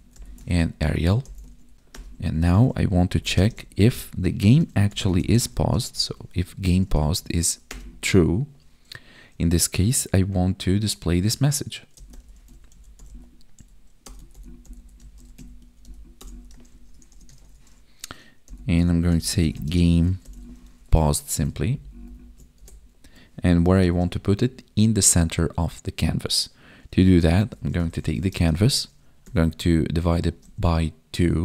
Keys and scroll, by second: 0.5 ctrl+s, 0.8 Right, 1.4 ctrl+s, 1.7 ctrl+z, 3.3 space, 6.0 Tab, 6.5 Right, 19.6 space, 21.0 ctrl+s, 21.5 ctrl+Down, 22.5 Right, 23.8 space, 28.3 space, 30.2 space.